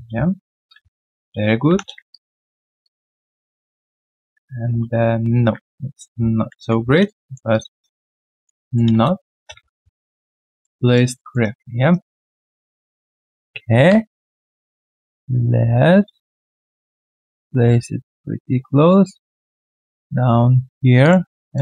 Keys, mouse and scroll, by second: 1.0 ctrl+alt+q, 1.6 w, 2.1 alt+right click, 2.8 alt+click, 4.7 ctrl+z, 5.1 ctrl+z, 6.5 ctrl+shift+x, 6.9 alt+right click, 7.9 alt+middle click, 8.2 alt+click, 8.6 alt+right click, 8.9 space, 9.6 f, 9.9 alt+right click, 10.4 alt+middle click, 10.8 alt+right click, 11.1 alt+middle click, 11.4 alt+right click, 17.3 ctrl+click, 21.0 ctrl+click, 21.4 alt+right click.